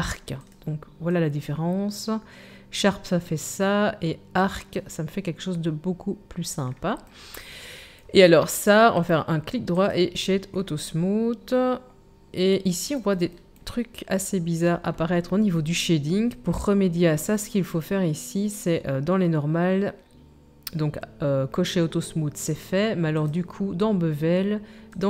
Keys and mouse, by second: 17.8-23.1 drag, 23.1 middle click, 23.3-24.9 drag, 24.9-25.0 middle drag.